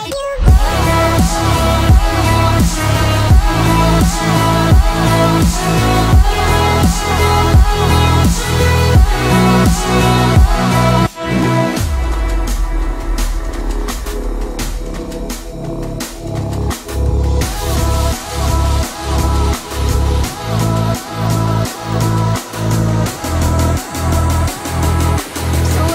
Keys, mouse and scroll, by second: 0.6 click, 4.4 shift+middle click, 4.9 scroll up 1, 5.5 space, 6.0 click, 6.5-7.1 scroll up 1, 7.1 b, 7.2 click, 9.0 scroll down 1, 9.5 shift+middle click, 10.7-11.2 scroll up 1, 11.6 middle click, 12.3 click, 12.5-12.9 scroll down 1, 12.9 click, 13.1 scroll down 1, 15.0 click, 16.9 middle click, 18.1 space, 18.7 click, 25.7 click.